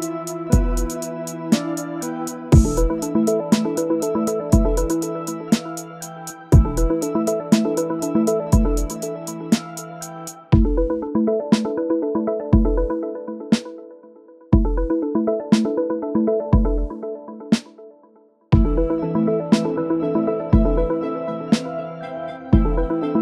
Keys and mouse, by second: 0.3 middle click, 0.6 KP_1, 1.4 shift+a, 3.9-4.2 middle drag, 4.6 shift+middle drag, 5.0-5.6 middle drag, 5.7 middle click, 5.9 Tab, 6.0-8.5 typing, 6.6 Tab, 9.3 click, 9.8 shift+d, 10.4 click, 10.7 drag, 11.1 Tab, 11.3 ctrl+a, 11.4-12.7 typing, 13.4-13.8 drag, 14.2 click, 14.2 s, 16.2 click, 17.8 click, 20.1 shift+middle drag, 20.7 click, 21.6 click.